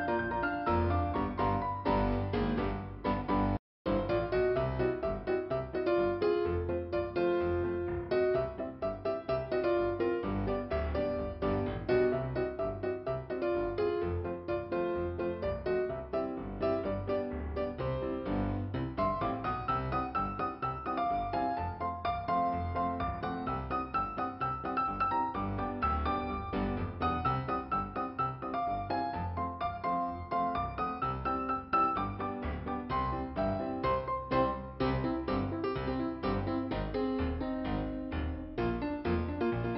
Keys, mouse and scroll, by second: 0.9 click, 2.5 right click, 3.3 middle click, 5.7 f, 6.3 scroll up 2, 6.3 f, 7.6 scroll up 1, 8.1 scroll down 1, 8.6-9.2 scroll up 1, 9.2-9.9 scroll down 2, 15.6 p, 16.2 scroll down 2, 22.2 f, 24.1 click, 26.0 p, 26.7 scroll down 1, 29.4 scroll up 1.